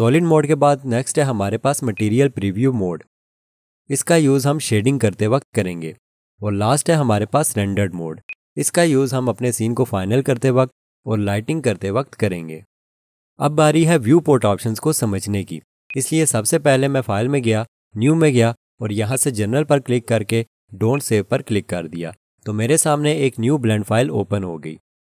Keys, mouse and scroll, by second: 1.9 click, 8.3 click, 15.9 click.